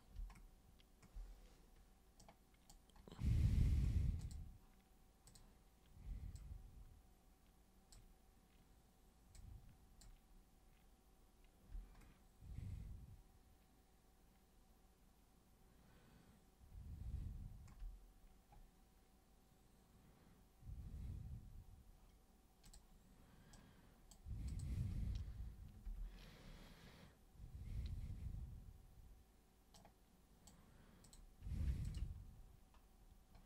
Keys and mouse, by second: 2.2 super+right click, 3.5 super+space, 4.2 super+click, 5.2 super+click, 6.3-7.9 super+drag, 9.3 super+click, 11.7 super+space, 22.6 super+click, 23.5 super+right click, 24.4 super+click, 29.7 super+right click, 31.0 super+click, 31.8 ctrl+shift+super+click.